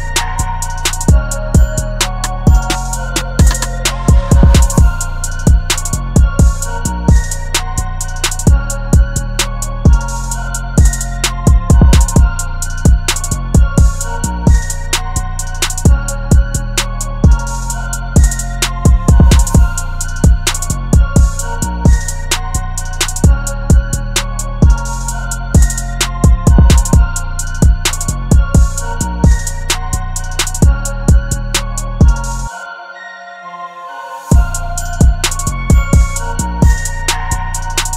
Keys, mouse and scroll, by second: 4.3-5.0 typing, 10.8 double click, 28.6 alt+click, 33.7 ], 34.2 ], 35.2-35.9 typing.